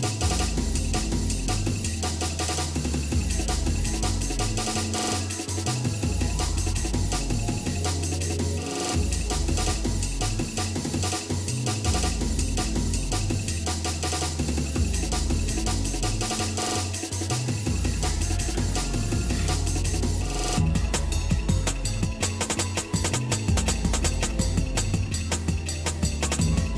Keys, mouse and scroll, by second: 0.0-1.1 scroll up 6, 1.8 click, 2.1 Tab, 2.6 click, 3.0 Tab, 3.8 shift+middle click, 4.9 middle click, 5.2 scroll up 1, 5.4 middle click, 6.0 scroll down 2, 6.7-10.9 shift+middle drag, 11.3 shift+middle click, 11.9 middle click, 12.6-13.1 scroll up 4, 14.5 ctrl+Tab, 15.8 click, 16.9 shift+click, 18.4 alt+m, 20.4 click, 21.7 ctrl+Tab, 23.6 click, 24.0 shift+click, 24.9 ctrl+x, 25.5 middle click, 26.1-26.5 scroll down 2, 26.5 shift+scroll up 1, 26.6-26.7 shift+middle drag.